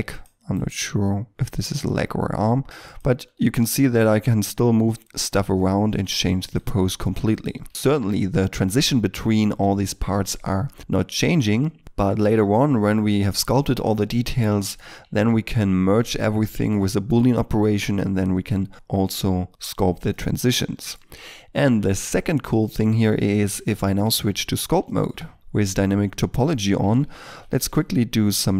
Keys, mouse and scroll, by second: 0.5 right click, 1.5 r, 1.7 r, 3.1 middle click, 3.9 g, 5.1 middle click, 6.2 g, 6.7 r, 7.7 shift+middle click, 14.4 middle click, 15.0-16.3 scroll up 1, 16.3 middle click, 20.0 middle click, 23.7 Tab, 24.8 shift+middle click, 25.4-27.2 scroll up 1, 27.2 x, 27.6 f, 28.2 f.